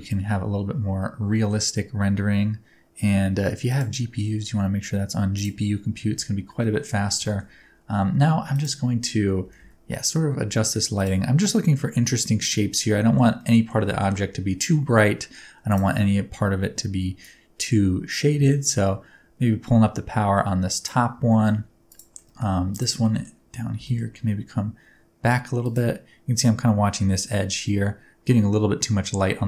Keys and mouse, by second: 3.6-5.1 drag, 6.7 middle click, 8.5 click, 9.4 g, 9.5 y, 10.9 click, 13.4-13.7 middle drag, 13.9 shift+middle click, 17.3-20.8 drag, 21.3 shift+click, 21.8 click, 22.1 middle drag, 23.0 middle drag, 23.7 g, 23.8 middle click, 25.6 click, 29.3 g.